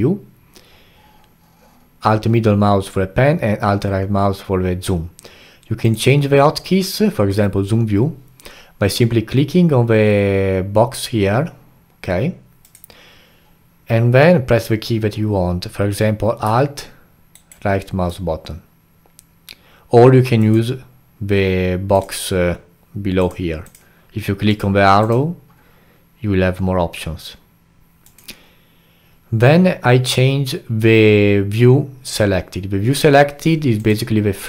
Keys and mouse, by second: 33.8 click.